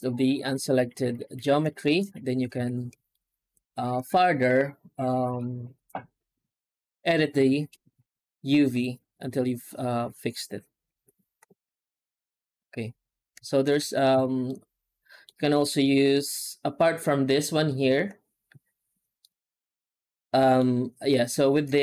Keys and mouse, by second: 1.7 shift+middle click, 2.4 alt+a, 3.0 shift+middle click, 3.2 middle click, 4.3 middle click, 7.0 2, 8.5 right click, 10.8 alt+h, 11.6 alt+a, 12.8 Tab, 13.4 shift+middle drag, 13.8 Tab, 14.0 a, 14.3 middle click, 15.3 shift+middle click, 19.1-20.4 middle drag.